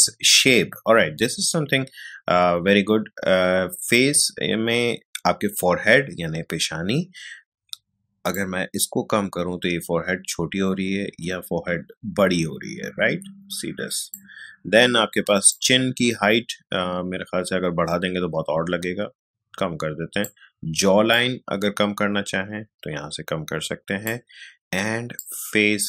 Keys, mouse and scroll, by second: 8.3-25.8 drag.